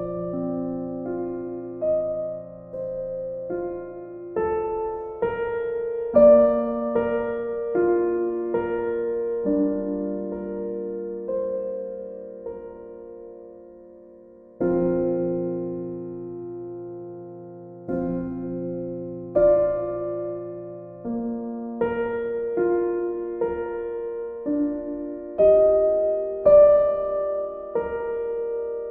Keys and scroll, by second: 16.4 b.